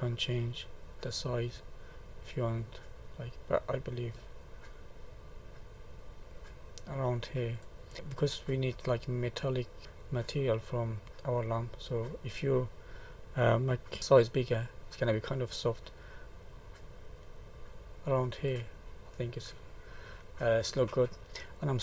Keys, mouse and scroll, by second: 0.3 click, 7.9 middle click, 8.1 middle click, 9.1 middle click, 9.8 middle click, 10.4 middle click, 11.5-12.1 scroll up 3, 12.5-12.9 scroll down 3, 14.0 click, 19.0 middle click.